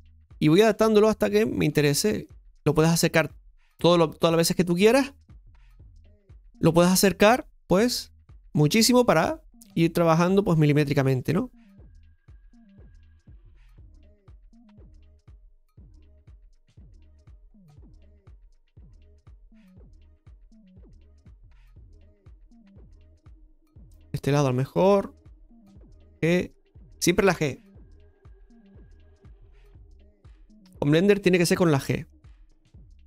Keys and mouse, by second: 2.1 g, 3.9 shift+middle click, 5.0 click, 9.2 click, 10.6 g, 14.2 right click, 14.7 click, 16.4 g, 17.1-22.2 drag, 22.3-24.4 shift+middle drag, 24.4 click, 31.6 shift+middle click.